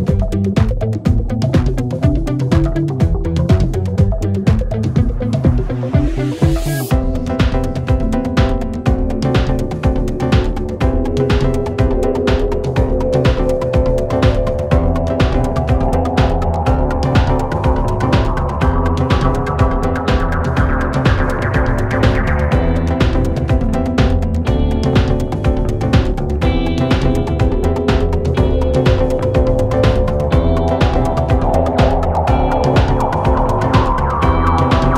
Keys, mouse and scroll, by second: 0.2 click, 3.5-4.7 shift+drag, 7.7 space, 8.3-9.0 drag, 24.7 click, 27.6-30.2 drag, 32.2-32.8 click, 33.7 drag.